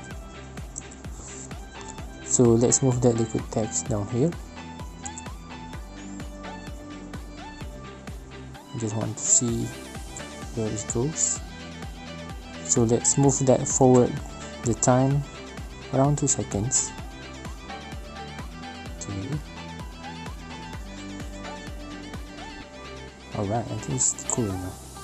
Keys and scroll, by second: 15.8 space, 18.6 space.